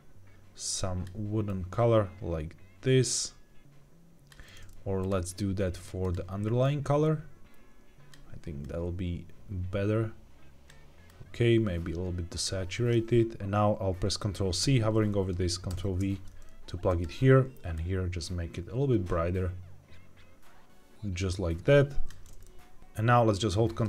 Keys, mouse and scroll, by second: 4.9 click, 5.9 click, 15.6 ctrl+v, 16.8 click, 22.3 middle click.